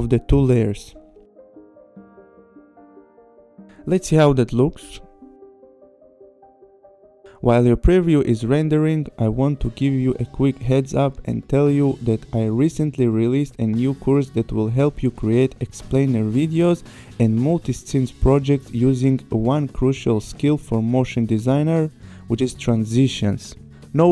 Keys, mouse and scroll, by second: 0.0 click, 2.2 click, 5.3 click, 7.9 click, 8.0 space.